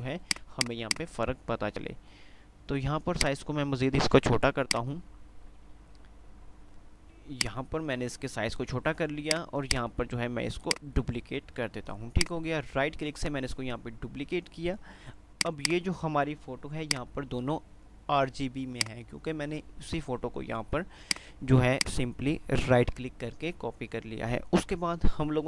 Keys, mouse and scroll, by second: 0.3 click, 1.1-2.3 drag, 3.4-4.4 shift+drag, 4.9-7.1 drag, 6.9 p, 7.6-10.8 drag, 10.3-11.3 ctrl+click, 10.8 ctrl+right click, 11.9 ctrl+F2, 15.3 ctrl+click, 20.9 typing.